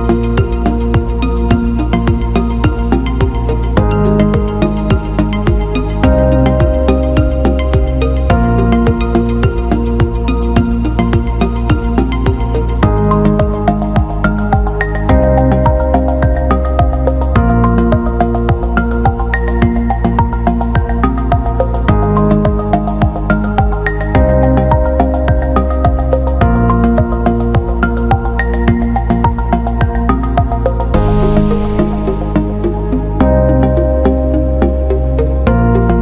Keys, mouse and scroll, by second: 3.5 click, 5.7 alt+shift+middle click, 6.9 Tab, 10.2 alt+shift+middle click, 13.4 click, 13.9 click, 16.4-19.4 ctrl+drag, 20.8-22.0 alt+middle drag, 22.5-24.1 alt+middle drag, 26.7 click, 27.7-29.5 drag, 31.6-34.6 drag, 35.5 click.